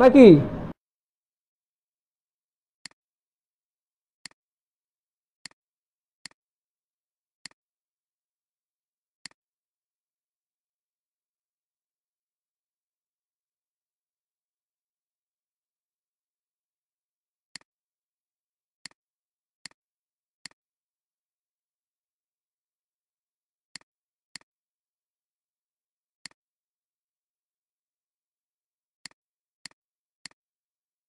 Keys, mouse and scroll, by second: 2.3 alt+scroll up 1, 2.7 space, 3.2 space, 7.3 space, 8.4 alt+scroll down 1, 9.6 alt+scroll up 1, 19.6 click, 20.4 click, 22.9 alt+scroll up 1, 23.5 space, 24.9 alt+scroll down 2, 28.5 alt+scroll down 1, 28.9 space, 30.1 space, 30.2 space.